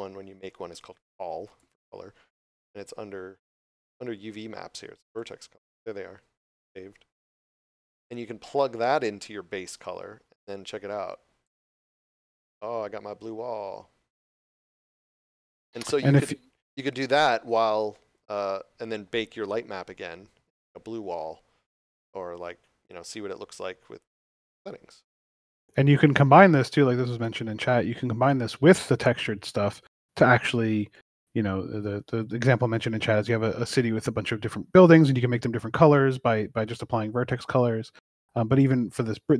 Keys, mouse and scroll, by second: 1.4 click, 3.5 scroll down 1, 5.1 click, 5.4 scroll down 1, 8.5 click, 28.2 scroll down 1, 28.8 scroll up 1, 30.5 scroll up 1, 37.3 scroll up 1, 38.3 scroll down 1.